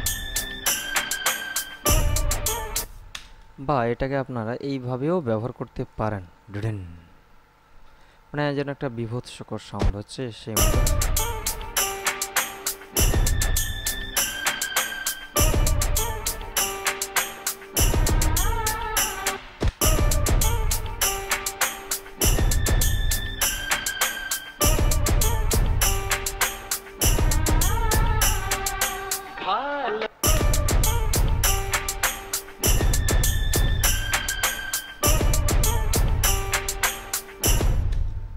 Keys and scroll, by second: 3.0 space, 10.7 space, 19.6 space, 30.4 space, 37.8 space.